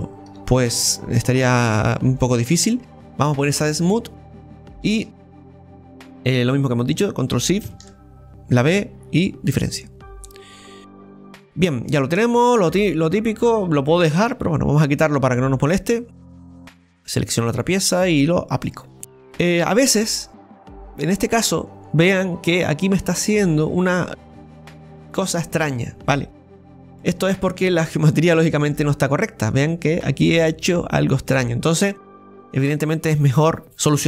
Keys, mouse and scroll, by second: 4.3 middle click, 4.9 shift+right click, 5.5-7.6 middle drag, 7.6 ctrl+shift+b, 10.2 middle click, 10.8 click, 11.1-11.4 scroll down 3, 11.4 middle click, 11.9-13.8 scroll up 1, 13.8 scroll down 1, 13.9-16.9 middle drag, 16.9-18.6 right drag, 18.7 click, 19.3 Delete, 19.7-20.0 scroll up 3, 20.0-25.1 middle drag, 25.1-26.1 scroll up 2, 27.0 right click, 28.1-28.5 scroll up 3, 28.6 shift+middle click, 29.2-32.1 middle drag.